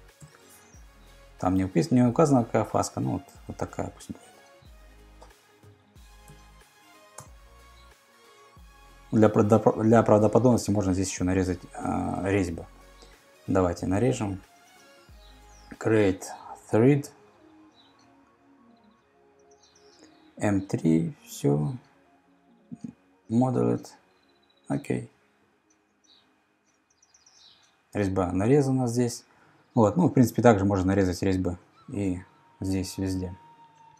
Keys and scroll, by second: 0.0-0.7 typing, 2.1 Return, 5.3-6.3 typing, 7.2 Return.